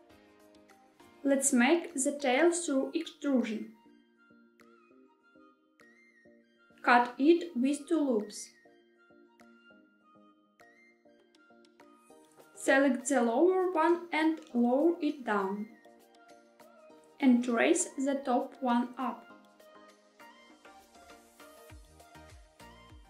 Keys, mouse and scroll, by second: 0.5 click, 1.2 e, 2.4 z, 6.3 click, 6.6 ctrl+z, 6.7 ctrl+r, 12.0 click, 12.5 click, 12.7 click, 14.5 g, 14.5 z, 16.5 click, 16.8 click, 17.0 click, 17.9 g, 18.4 z, 21.2 click, 21.9-23.0 middle drag.